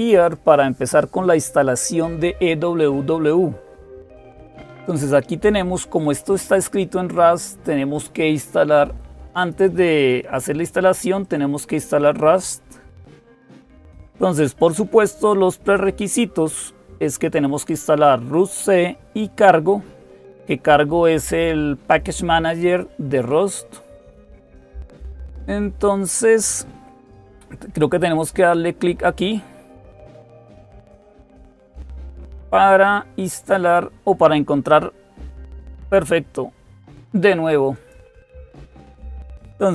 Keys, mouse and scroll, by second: 6.4-8.0 drag, 9.2 click, 11.0-15.2 drag, 15.2-20.1 scroll down 1, 20.1-33.9 drag, 37.5 click.